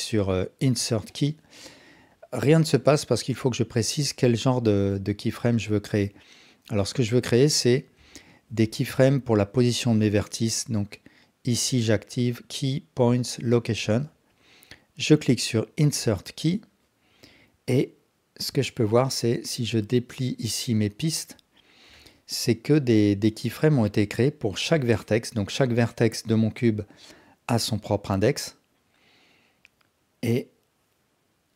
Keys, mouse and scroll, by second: 1.2 click, 8.1 ctrl+alt+click, 8.6 alt+shift+click, 16.2 click, 23.1 click, 30.4-31.5 drag.